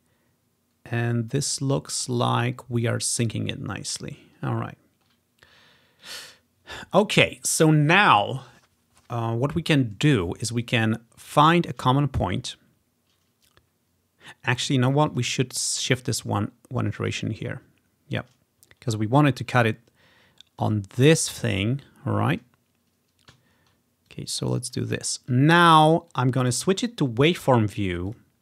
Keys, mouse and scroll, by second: 4.4-6.1 ctrl+scroll down 3, 6.1-8.5 drag, 15.1 click, 15.9-17.2 drag, 17.4-18.4 scroll up 1, 18.8-19.7 scroll down 1, 19.7 click, 21.8-22.8 ctrl+scroll up 3, 21.9 ctrl+click, 23.5-24.7 ctrl+scroll up 2, 24.1 click, 25.0-26.8 ctrl+scroll down 3, 26.1 click, 27.4 click, 28.1 click.